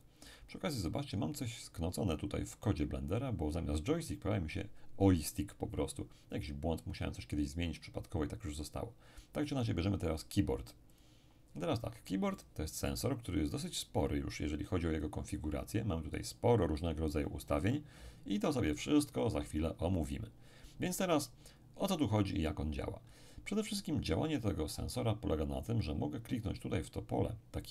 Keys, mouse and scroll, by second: 10.9 click, 12.3-16.0 middle drag, 13.7-16.0 drag.